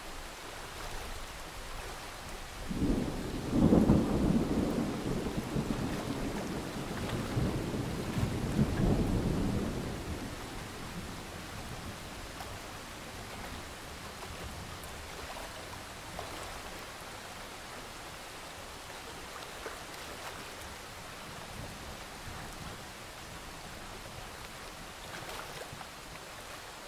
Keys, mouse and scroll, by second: 1.3 alt+scroll up 1, 1.5 click, 3.6-4.0 alt+scroll down 2, 4.0-5.0 alt+scroll up 2, 5.0 click, 6.1-6.6 alt+scroll up 1, 6.6-9.2 drag, 9.6-10.4 alt+scroll down 1, 10.4 click, 11.8 alt+scroll down 1, 12.2-12.5 scroll up 1, 13.1-14.2 ctrl+scroll down 1, 14.2 scroll up 1, 15.9 scroll down 1, 16.1-17.1 scroll up 1, 17.2 alt+scroll up 1, 18.1 click, 18.4 scroll down 1, 18.9 typing, 18.9-20.4 scroll up 1, 20.4 click, 22.3 Escape, 23.1 click, 24.5 Escape, 24.7-26.5 scroll down 1, 26.5 click.